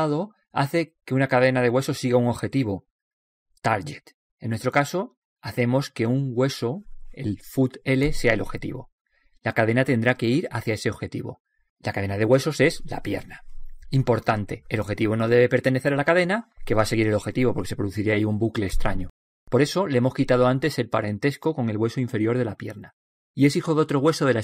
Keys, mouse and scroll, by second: 3.7 n, 4.3-6.2 middle drag, 6.4 middle click, 7.2-9.2 middle drag, 8.7-10.6 right drag.